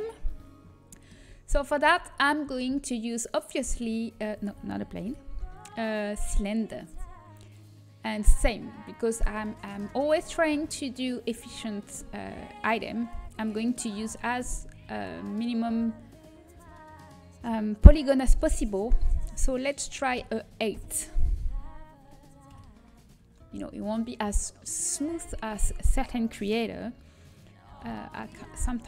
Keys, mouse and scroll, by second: 2.4 a, 5.4 ctrl+z, 5.4 shift+a, 14.5 click, 21.5 middle click, 22.4 KP_1, 25.4 s.